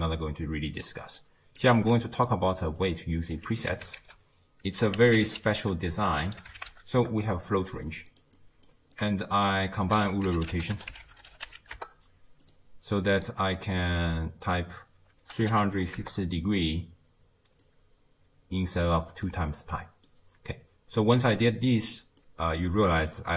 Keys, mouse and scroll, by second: 1.2-1.6 drag, 1.7 x, 2.8-7.0 drag, 11.8 ctrl+a, 13.3-13.9 drag, 16.0-19.3 drag, 21.0-22.2 drag, 22.2-23.1 middle drag, 23.1-23.3 scroll up 2.